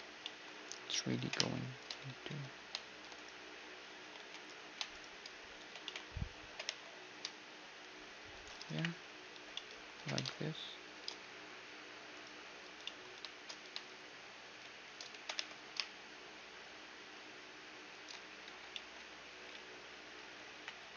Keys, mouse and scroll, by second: 0.0 middle click, 0.3-6.4 right drag, 0.8-3.8 typing, 5.3 b, 5.8 z, 6.1 g, 8.4 KP_1, 8.9 z, 9.6-10.8 middle drag, 9.6 z, 9.6 g, 10.8 1, 11.7-14.1 right drag, 12.4 click, 12.4-14.2 middle drag, 13.5-14.8 typing, 18.1-20.1 typing, 18.5-20.1 middle drag.